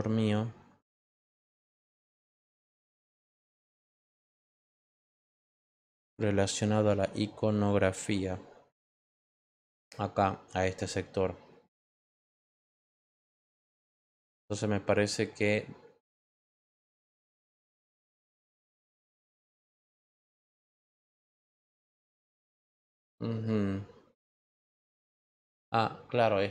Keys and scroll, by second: 1.2 Return.